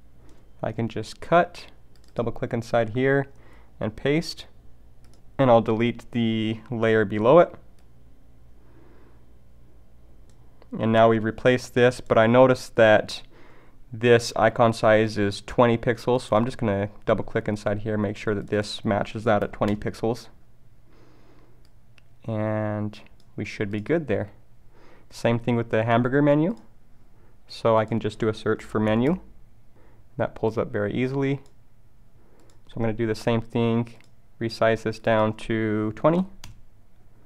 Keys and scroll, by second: 1.1 super+x, 3.5 super+v.